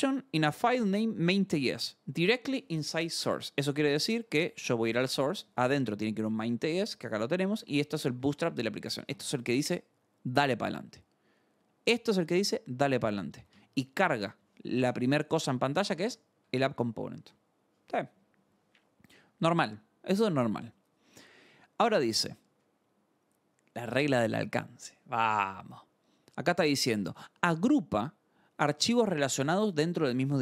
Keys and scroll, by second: 3.4 alt+Tab, 4.2 Escape, 4.4 k, 5.4 Return, 5.9-9.3 typing, 6.6 Return, 12.4-16.5 typing, 14.0 Escape, 15.0 Escape, 17.1 alt+Tab, 19.1 scroll.